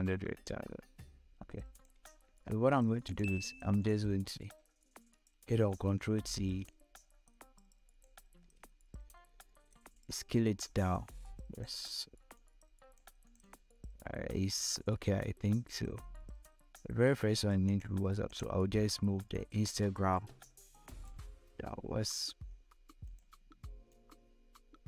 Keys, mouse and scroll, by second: 1.2 click, 5.0 ctrl+t, 6.2-8.0 drag, 8.0 scroll up 1, 9.5-12.8 drag, 19.2-22.6 shift+drag, 23.5-24.8 shift+drag.